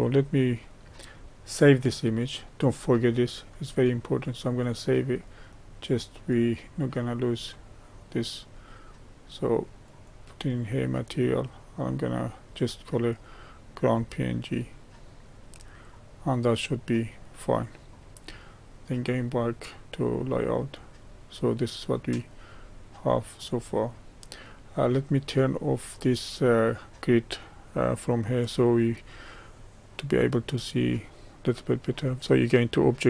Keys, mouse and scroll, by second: 6.7-15.1 drag, 16.7-19.2 middle drag, 19.2 click, 20.2-22.4 middle drag, 22.4 click, 23.4-25.3 middle drag, 25.3 scroll down 1, 26.4 click.